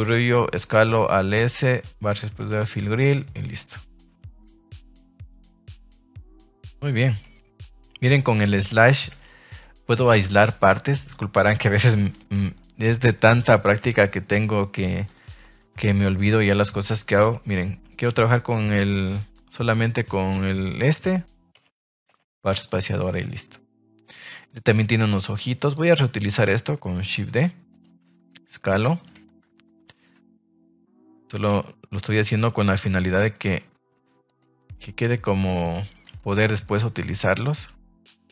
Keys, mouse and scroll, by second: 0.0 s, 0.5 click, 1.4 click, 1.6 space, 2.9 Tab, 3.2-3.9 middle drag, 4.5 shift+middle drag, 5.2 KP_0, 6.4 KP_0, 7.2 KP_Divide, 10.0 a, 10.2 a, 10.4 middle drag, 11.1 shift+middle drag, 11.4-11.7 middle drag, 12.3 ctrl+s, 12.5-13.1 middle drag, 13.5 shift+middle drag, 13.8 middle click, 14.6 middle click, 14.8 middle click, 15.1 shift+middle click, 15.7 ctrl+s, 16.1 right click, 17.1 KP_Divide, 18.1 KP_Divide, 20.3 right click, 21.5 KP_Divide, 22.0 KP_Divide, 22.7 a, 22.8 a, 24.4 shift+middle drag, 25.3 ctrl+s, 25.7 right click, 26.2 shift+middle click, 27.1 shift+d, 27.6 click, 28.0 s, 28.9 click, 29.2 shift+middle click, 29.6 middle click, 30.1 r, 30.7 click, 31.0 middle click, 31.4 g, 32.1 middle click, 32.8 r, 33.3 click, 33.4 g, 34.2 click, 34.7 s, 35.6-36.0 middle drag, 35.6-36.0 scroll up 1, 36.0 scroll down 1, 36.1-36.4 scroll up 2, 36.4 middle click, 36.6 scroll down 1, 36.9-37.5 scroll up 1, 37.5-38.3 scroll down 1.